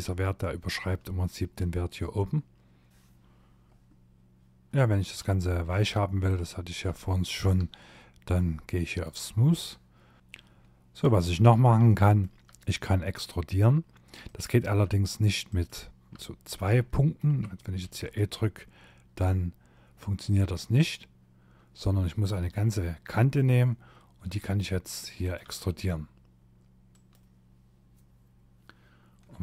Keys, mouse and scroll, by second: 3.7 middle click, 4.3-4.7 scroll up 4, 4.7 middle click, 5.5 scroll down 2, 6.0 shift+middle click, 7.8 click, 10.2 middle click, 10.8 shift+middle click, 13.3 click, 14.5 shift+click, 15.1 middle click, 15.9 shift+middle click, 16.8 e, 21.2 click, 23.2 e, 24.4 e, 28.0 scroll down 2, 28.6 shift+middle click.